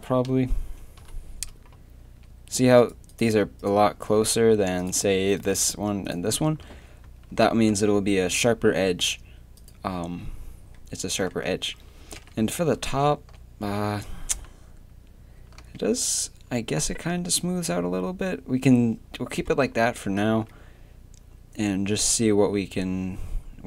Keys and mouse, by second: 1.0 KP_3, 1.2 z, 2.0 z, 6.6 z, 7.0 a, 7.3 z, 11.5 z, 12.2 KP_7, 12.6 z, 13.1 z, 14.2 a, 15.6 z, 20.3 Tab.